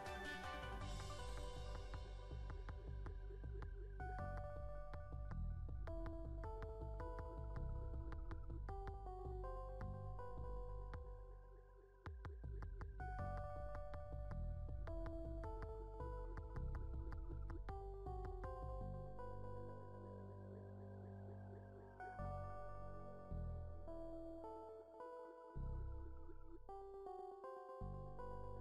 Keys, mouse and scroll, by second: 0.6 ctrl+z, 0.8 ctrl+z, 1.1 click, 1.5 KP_3, 2.1 KP_1, 2.4 middle click, 3.0 click, 4.1 click, 4.5 e, 5.8 r, 6.3 click, 6.9 e, 7.6 r, 8.6 click, 9.2 click, 9.6 e, 10.6 r, 11.2 middle click, 11.7 e, 14.3 r, 14.7 click, 15.3 middle click, 17.1 middle click, 17.9 middle click, 18.5 e, 19.9 middle click, 20.8 e, 20.9 middle click, 21.1 s, 22.1 e, 22.6 click, 23.1 middle click, 23.4 KP_3, 23.9 KP_1, 24.2 middle click, 25.0 click, 25.6 middle click, 26.1 click, 27.3-28.6 middle drag.